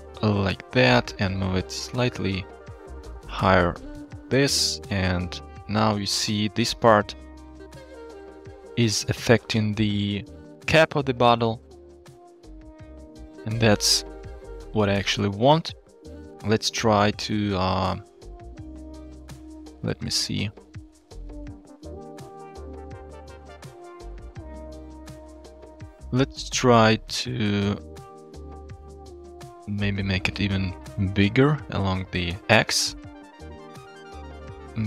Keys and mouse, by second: 2.3-6.2 shift+drag, 9.6-10.3 shift+drag, 13.3 KP_0, 17.1 shift+middle click, 20.0 shift+middle click, 21.0-21.5 shift+middle drag, 22.7 middle click, 24.4-25.6 shift+middle drag, 28.2 shift+middle click, 28.6 shift+click, 29.1-33.5 shift+drag, 33.8 shift+click, 34.7-34.8 shift+drag.